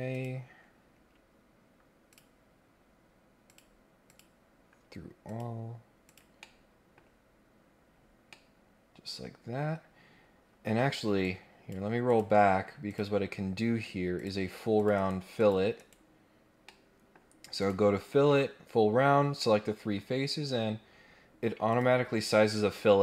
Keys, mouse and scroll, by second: 0.1 click, 2.1 click, 3.4 click, 4.1 click, 5.2 click, 6.0 click, 6.4 middle click, 7.6 scroll down 1, 7.8 scroll up 1, 8.3-9.6 middle drag, 11.2 click, 12.1 click, 12.8 click, 14.1 click, 14.7 click, 14.9 right click, 15.4 click, 15.7 right click, 16.6 middle click, 17.5 click, 19.4 middle click, 21.7 click.